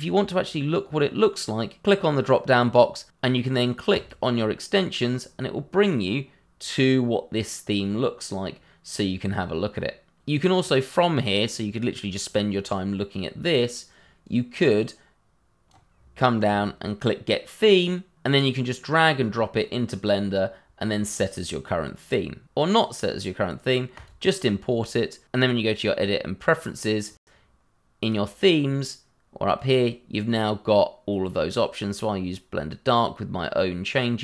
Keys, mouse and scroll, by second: 3.9 click, 6.1 scroll down 1, 7.8 scroll up 1, 8.6 scroll down 1, 10.6 scroll up 1, 12.5 scroll down 1, 14.2 click, 15.9 scroll down 1, 17.4 click, 18.6 click, 22.7 click.